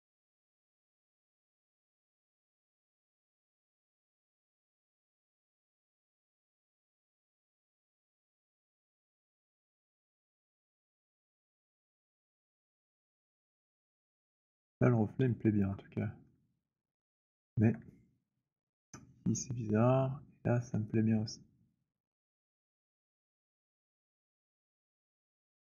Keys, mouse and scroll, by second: 0.7 alt+click, 1.7 click, 4.1 click, 8.9 click, 11.2 alt+click, 11.2-11.7 alt+scroll, 12.8-14.3 alt+scroll, 14.4 alt+click, 15.6 alt+click, 16.3 alt+middle click, 17.6 alt+click, 18.7 alt+click, 19.3 alt+middle click, 19.9 alt+middle click, 22.3 alt+middle click, 24.0 alt+click, 25.0 alt+click.